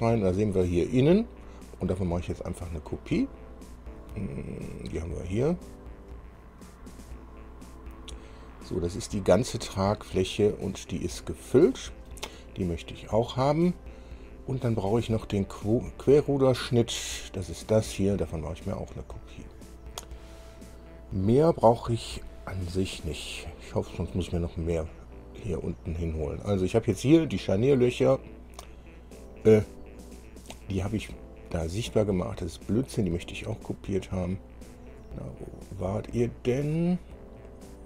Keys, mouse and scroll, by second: 1.0 click, 5.5 click, 8.4 scroll down 2, 9.6-12.5 middle drag, 16.5 click, 19.3 click, 25.2 click, 30.7-37.8 drag.